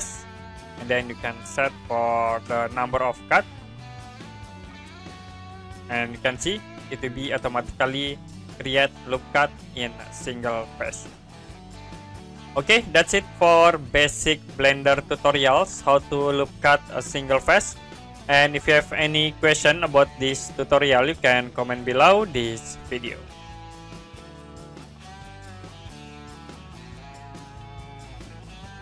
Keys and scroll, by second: 21.4 Print.